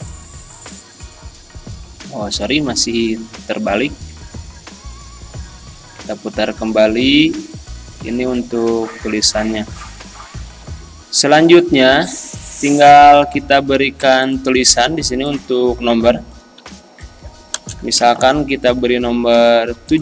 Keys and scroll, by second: 16.6 t, 18.0 1, 18.2 7.